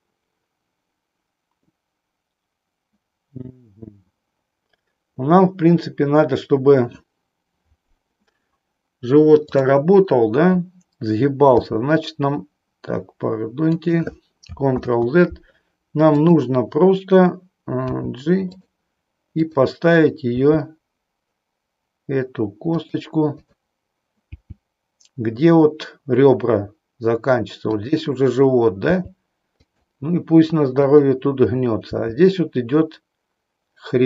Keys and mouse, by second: 9.5 click, 11.6 g, 13.9 click, 14.6 ctrl+z, 16.0 click, 17.8 g, 19.3 click, 20.5 g, 24.4 g, 28.9 g, 29.6 click, 30.8 click.